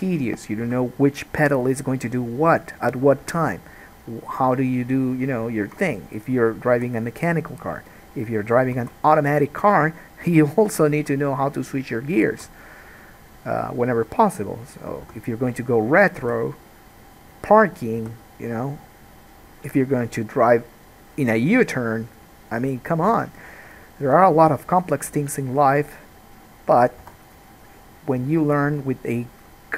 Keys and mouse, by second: 0.8 KP_3, 1.6-26.2 drag, 2.1 g, 3.4 alt+a, 3.7 middle click, 3.7 right click, 6.9 g, 8.9 alt+a, 9.5 middle click, 9.5 right click, 10.4 g, 12.6 alt+a, 15.2 2, 16.4 g, 18.2 g, 23.4 alt+a, 26.9 middle click, 27.3 1, 27.4 middle click, 28.5 ctrl+middle click.